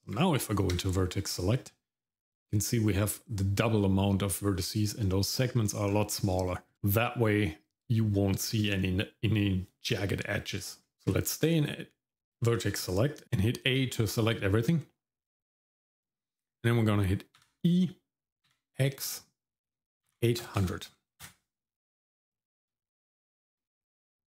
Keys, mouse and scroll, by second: 0.1 Tab, 4.5-5.9 scroll up 2, 5.9-6.3 scroll down 1, 6.5 shift+middle click, 11.1 Tab, 12.5 shift+middle click, 17.4 e, 22.4 shift+middle click, 22.8 middle click, 23.3 shift+middle click, 23.8 middle click.